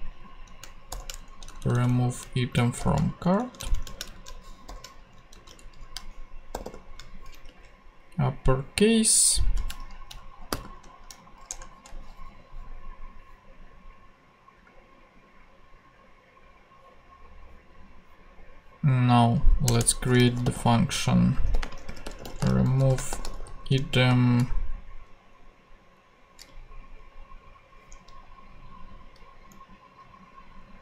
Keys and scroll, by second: 0.9 shift+-, 1.3 shift+Right, 2.2 Left, 2.8 shift+-, 3.0 shift+Right, 3.8 shift+Right, 4.1 shift+Left, 4.6 shift+-, 5.0 shift+Right, 5.9 alt+shift+super+Left, 6.5 alt+shift+super+u, 7.3 ctrl+shift+super+u, 7.4 ctrl+shift+super+Tab, 8.0 ctrl+shift+Tab, 10.5 shift+m, 11.5 shift+Return, 12.1 Return, 19.6 Return, 20.2 c, 21.6-24.1 typing.